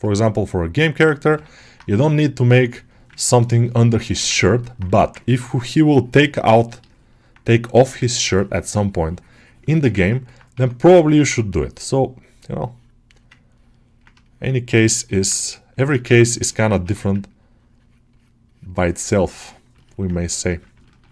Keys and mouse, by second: 0.1 alt+shift+middle click, 0.3 alt+middle click, 1.5 middle click, 2.0 click, 3.0-4.1 ctrl+alt+shift+middle drag, 3.7 alt+click, 4.2 ctrl+alt+middle click, 4.5 middle click, 5.0 ctrl+1, 6.5 ctrl+click, 6.9 alt+middle click, 7.4 click, 8.0 ctrl+click, 8.4 alt+middle click, 8.7 shift+click, 9.6 alt+shift+middle click, 9.9 ctrl+alt+middle click, 10.9 ctrl+alt+middle click, 12.5 click, 13.4 ctrl+click, 14.1 shift+click, 14.8 shift+middle click, 15.0 alt+middle click, 15.3 shift+click, 15.7 alt+shift+middle click, 16.0 ctrl+alt+middle click, 16.4 ctrl+middle click, 17.3-19.5 drag, 19.6 ctrl+alt+middle click, 20.7 ctrl+alt+middle click.